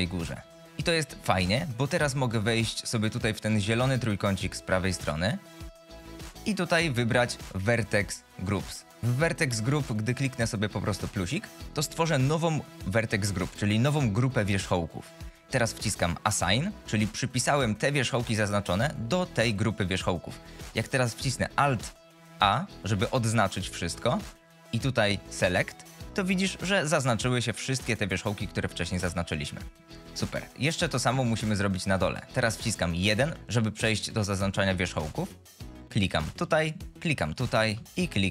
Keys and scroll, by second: 0.2 z, 18.0 F22, 22.6 alt+a, 33.0 1.